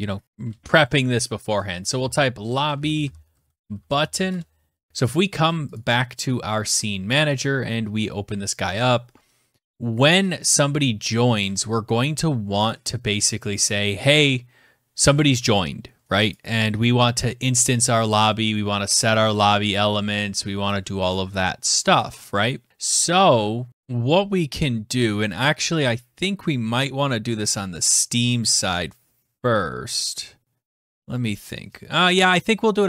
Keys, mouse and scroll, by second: 1.7-4.1 typing, 5.3 click, 6.3 click, 12.2 click, 15.8 click, 17.3 middle click, 18.7 click, 19.0-20.9 scroll, 21.3-22.0 scroll, 22.0-22.9 scroll, 23.5-24.3 scroll.